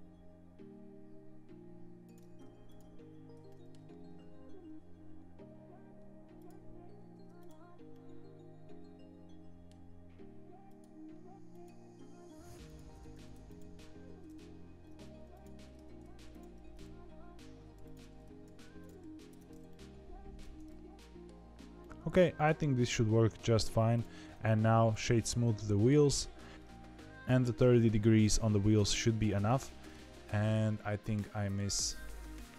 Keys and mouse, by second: 2.0 click, 3.4 middle click, 6.9 ctrl+e, 7.8-9.6 middle drag, 10.6 click, 13.0 ctrl+e, 15.8 ctrl+e, 19.2 Tab, 19.6 middle click, 20.9 middle click, 21.7 middle click, 25.3 middle click, 26.0 middle click, 29.6 middle click, 30.0 shift+middle click, 30.6 shift+middle click, 31.3 shift+middle click, 31.6 middle click, 32.1 click, 32.3 Tab.